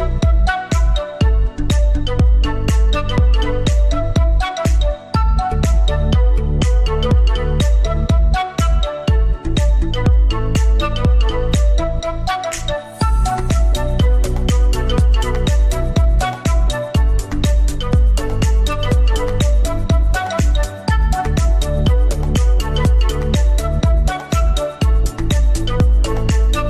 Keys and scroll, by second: 3.4 F3, 6.6 F4, 7.0 Escape, 10.0 shift+Page_Up, 10.4 F4, 10.8 Escape, 11.8 c, 12.4 Escape, 15.6 Escape, 15.8 F2.